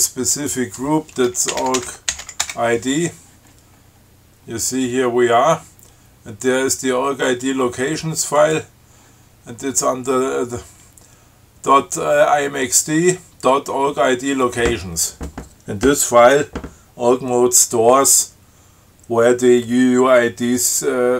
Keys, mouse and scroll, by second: 0.6 click, 1.5-3.0 typing, 4.2 scroll down 2, 5.6 scroll down 2, 7.6 click, 8.6 click.